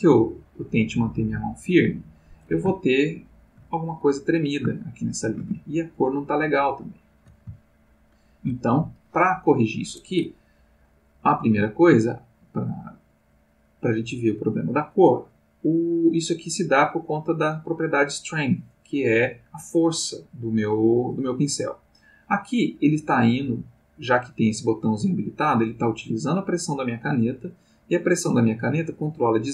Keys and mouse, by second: 2.7-3.7 ctrl+middle drag, 4.7 ctrl+middle click, 6.0 shift+middle click, 6.5 shift+middle click, 7.5-8.6 ctrl+shift+middle drag, 20.9 click.